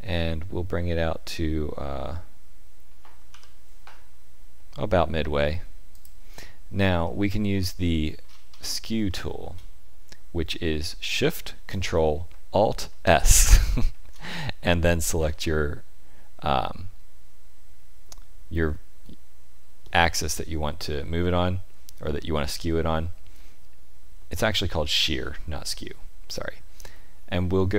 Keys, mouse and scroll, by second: 7.0 shift+middle click, 8.2-8.7 scroll up 4, 9.0 shift+middle click, 13.4 ctrl+alt+shift+s.